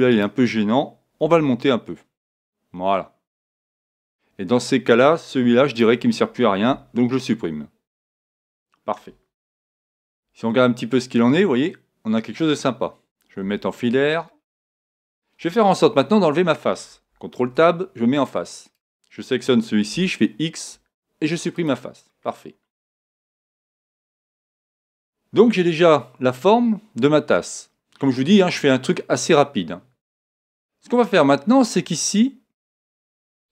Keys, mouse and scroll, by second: 0.2-1.8 right drag, 1.2 g, 4.1-5.9 drag, 5.7-7.6 right drag, 6.7 x, 9.6 Tab, 9.9 middle click, 10.5-12.4 middle drag, 13.4 z, 14.3-16.2 middle drag, 15.8 Tab, 17.4 ctrl+Tab, 18.7-20.6 right drag, 19.9 x, 22.2-25.0 middle drag, 23.9 KP_1, 32.4-33.5 middle drag.